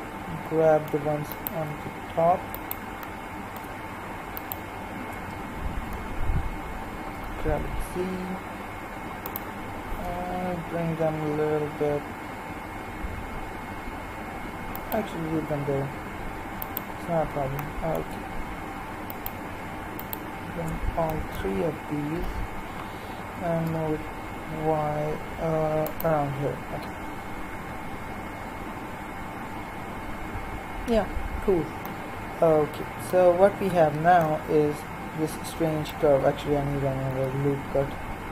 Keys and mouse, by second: 1.3-5.8 right drag, 5.8 KP_3, 7.2 g, 10.0 g, 16.6-22.2 right drag, 17.6-22.2 middle drag, 22.2 KP_3, 23.3 g, 33.6 z, 37.1 KP_3.